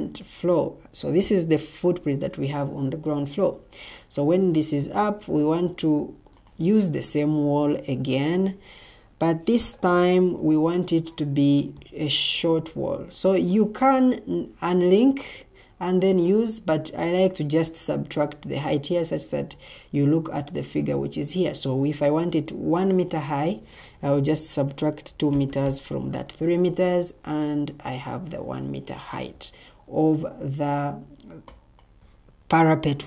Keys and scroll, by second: 9.5 ctrl+t, 24.4-26.0 typing.